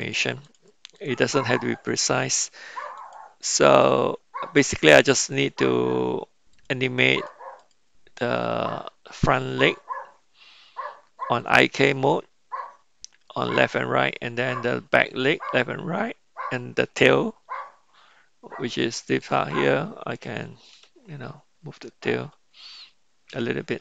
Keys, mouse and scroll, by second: 0.0 click, 0.4 drag, 0.9 click, 2.9 click, 6.5 click, 7.2 click, 7.6 click, 19.2 click, 20.7 r.